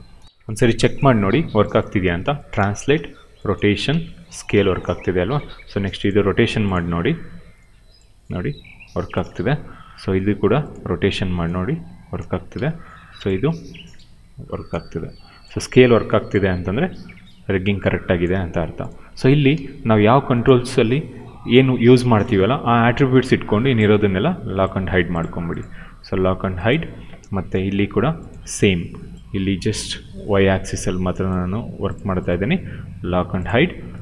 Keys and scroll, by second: 1.9 w, 2.5 ctrl+z, 2.8 e, 3.4 ctrl+z, 3.7 r, 4.4 ctrl+z, 7.2 e, 9.1 ctrl+z, 9.9 w, 10.8 e, 12.1 ctrl+z, 12.4 q, 14.6 ctrl+z, 15.5 r, 18.2 ctrl+z, 19.1 w, 21.4 e, 23.0 ctrl+z, 27.4 q, 29.9 ctrl+z.